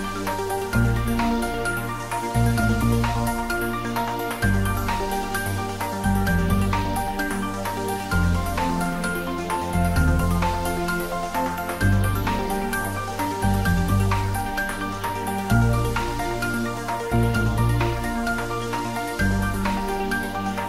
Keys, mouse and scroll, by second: 2.3 Return, 4.9 Return, 5.2 ctrl+s, 5.9 click, 6.7 Return, 9.1 ctrl+Return, 9.6 ctrl+s, 10.0 Tab, 10.5-11.8 middle drag, 11.8 ctrl+s, 15.1 middle click, 16.0-17.3 ctrl+middle drag, 17.3-19.0 ctrl+middle drag.